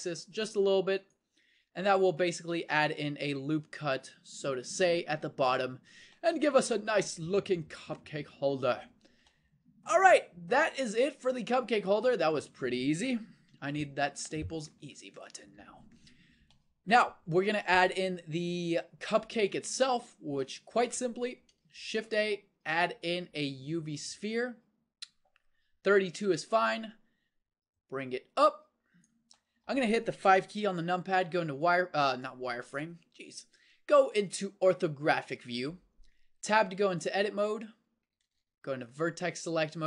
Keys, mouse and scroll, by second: 1.7 Tab, 2.4 z, 8.6-11.4 middle drag, 14.1 KP_1, 15.9 middle click, 21.9 shift+a, 27.8-29.4 drag, 29.4-31.2 middle drag, 31.2 KP_5, 36.4 Tab, 38.2 ctrl+Tab.